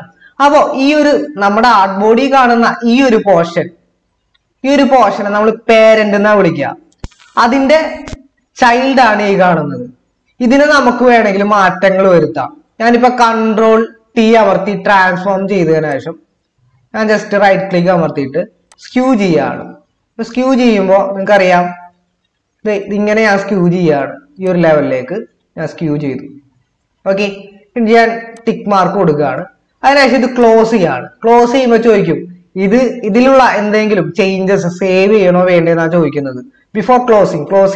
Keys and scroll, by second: 14.3 ctrl+t.